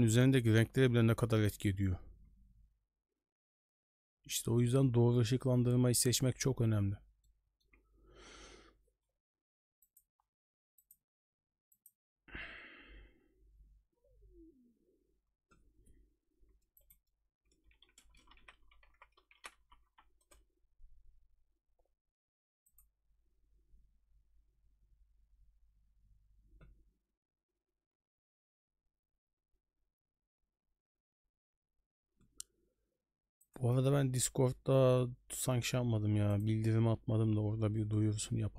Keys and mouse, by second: 0.0 middle click, 0.6 j, 1.1 j, 2.3 j, 2.8 j, 3.2 j, 7.3 middle click.